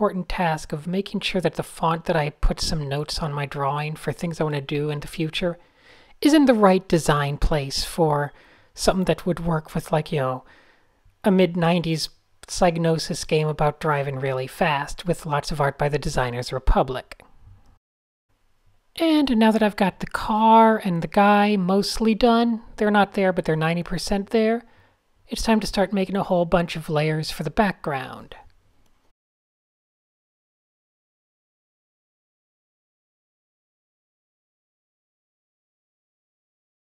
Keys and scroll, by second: 0.6 fn+F7, 2.1 fn+F7, 2.5 shift+super+a, 3.1 Tab, 4.2 Tab, 5.7 shift+super+h, 5.8 typing, 6.3 shift+super+a, 8.1 Tab, 8.3 shift+o, 12.5 shift+super+z, 13.0 super+z, 14.5 super+z, 16.5 shift+o, 17.5 a, 17.6 Tab, 18.0 a, 18.9 Tab, 20.0 Tab, 21.1 alt+super+i, 22.0 Escape, 22.2 Tab, 22.5 Escape, 22.5 Tab, 23.9-33.3 typing, 32.2 alt+super+l, 35.6-36.5 typing.